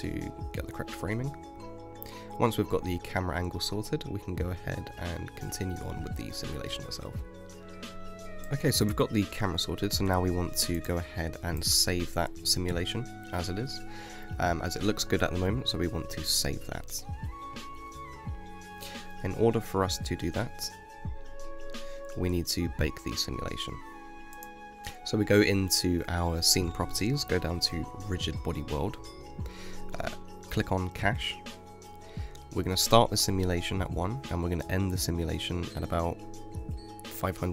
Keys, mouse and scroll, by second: 0.4-1.6 scroll down 1, 1.6 ctrl+alt+KP_0, 2.4-3.5 scroll up 10, 3.5 middle click, 4.0-4.4 scroll down 4, 4.4-7.9 middle drag, 7.9 KP_0, 8.2 space, 13.0 space, 14.7 click, 16.5 scroll up 2, 19.5 space, 27.3 click, 29.1-32.2 drag, 32.3 click, 32.8-35.4 scroll down 3, 35.4-37.5 drag.